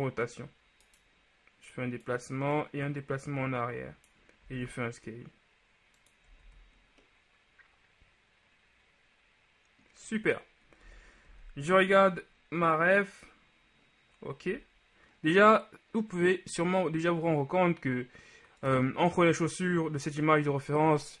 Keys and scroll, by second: 4.7 shift+s, 6.5 shift+z, 11.0 KP_1, 11.4 z, 14.6 z.